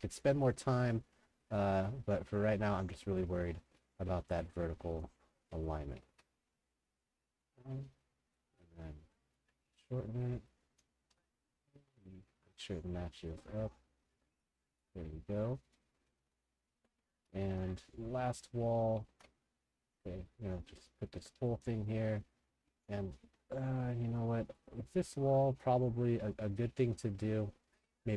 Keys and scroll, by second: 0.4 ctrl+g, 3.6 w, 4.4 d, 10.1-11.7 typing, 15.9-18.5 typing, 19.1 ctrl+g.